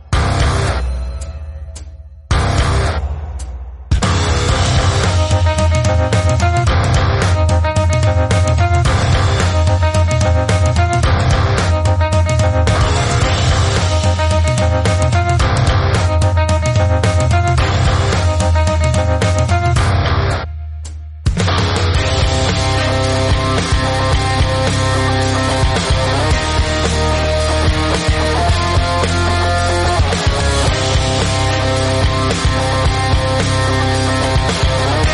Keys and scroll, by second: 0.0-1.1 typing, 4.9 space, 5.3 space, 9.8 shift+x, 11.3 shift+a, 15.4 ctrl+v, 16.1-16.6 typing, 16.9 Return, 17.9 ctrl+g, 18.7-19.9 typing, 21.3 shift+a, 22.3 shift+a, 30.5 Tab, 30.5 s, 31.5 Tab, 33.0 shift+a.